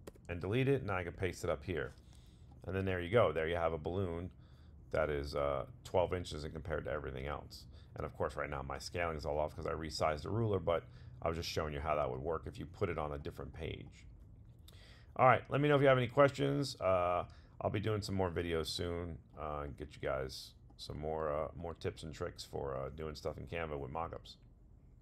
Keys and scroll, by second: 1.2 super+v.